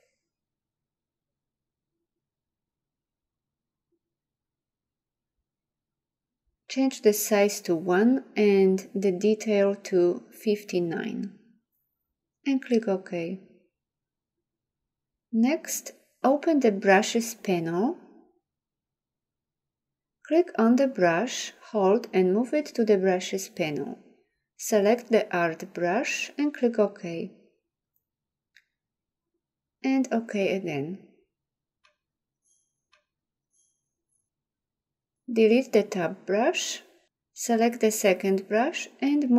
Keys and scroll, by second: 36.7 Delete.